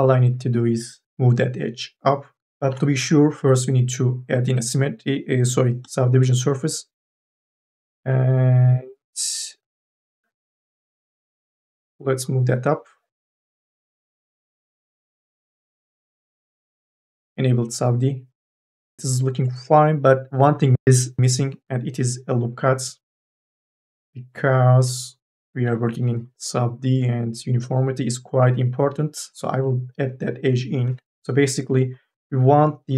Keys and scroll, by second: 2.8 ctrl+z, 8.2 q, 21.8 q, 22.9 Tab, 25.4 k, 25.9 l, 30.6 2, 31.1 e.